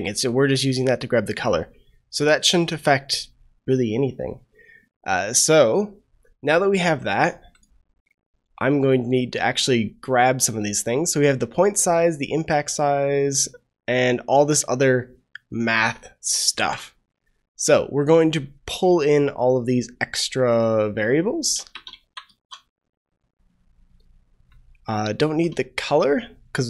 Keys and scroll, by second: 16.5 ctrl+c, 22.0 ctrl+v, 22.2 ctrl+s.